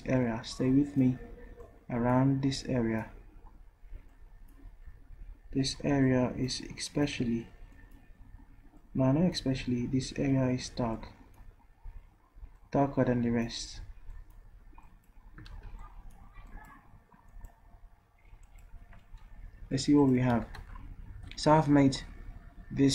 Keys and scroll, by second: 15.5 ctrl+z, 20.3 v.